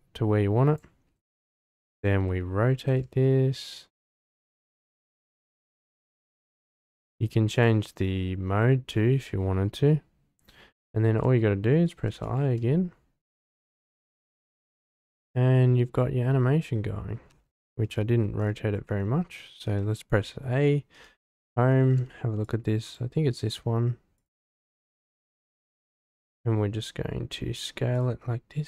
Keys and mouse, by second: 2.1 r, 2.9 x, 3.1 x, 7.5-10.7 drag, 12.1 i, 13.6-14.6 drag, 14.6 space, 17.3 space, 19.7 a, 20.9 Home, 22.4-22.9 drag, 23.4 s, 24.5-25.2 drag, 25.5 drag, 26.2 s.